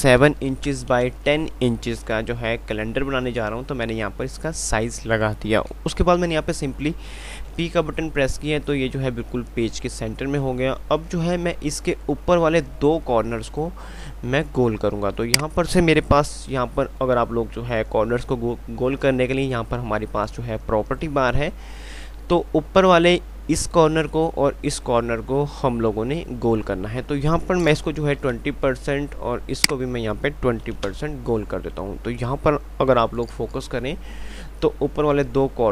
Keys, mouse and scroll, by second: 0.8 Tab, 7.8 p, 15.5 click, 34.1 F5.